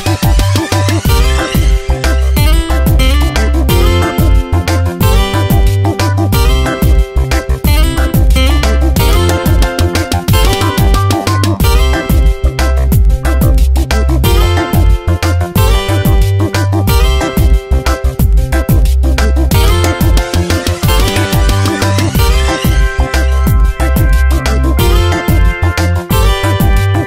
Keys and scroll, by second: 1.0 ctrl+shift+z, 16.3 ctrl+z, 22.8 ctrl+z.